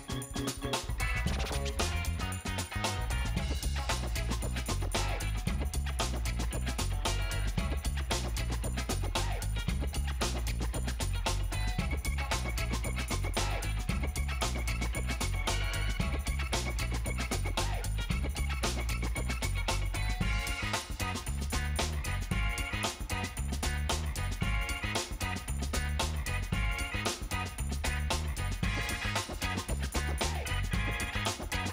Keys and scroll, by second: 20.0 space, 28.6 space.